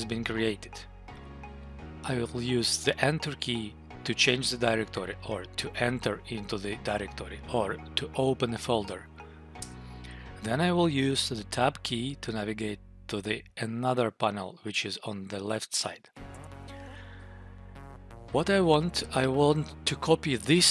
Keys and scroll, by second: 9.5 Return, 16.3 Tab, 19.6 Down.